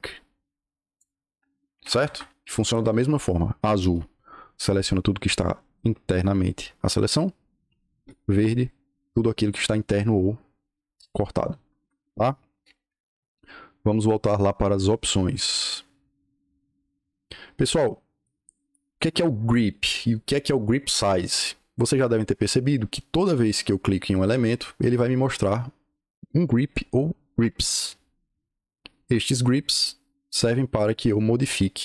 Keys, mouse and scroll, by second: 0.0 click, 1.7 Escape, 1.9 Escape, 11.7 Escape, 11.9 Escape, 12.2-13.0 typing, 23.2 click, 25.1 click, 29.5 click, 30.3 click, 31.3 click.